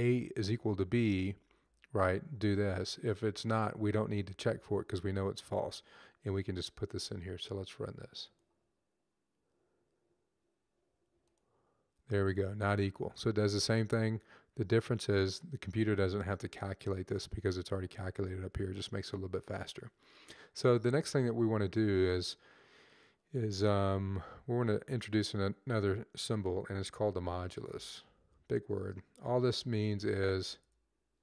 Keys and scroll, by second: 0.1 Up, 0.6 Down, 1.1 Down, 3.0 Down, 3.9 Down, 4.6 Up, 24.2 Left, 26.6 Up, 28.0 shift+5, 29.3 /, 29.5 /, 30.1 shift+5, 31.1 /.